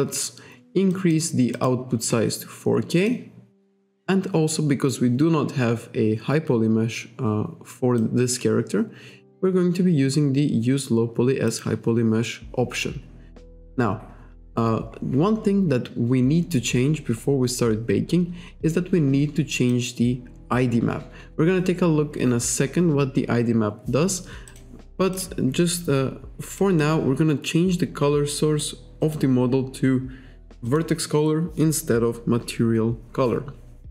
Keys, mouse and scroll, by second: 0.9 click, 1.6 click, 3.1 click, 8.0 click, 11.5 click, 13.3-13.7 scroll down 1, 14.9-15.7 scroll up 1, 19.7 click, 24.5 click, 25.2 click, 26.6 click, 29.1 click, 30.7 click.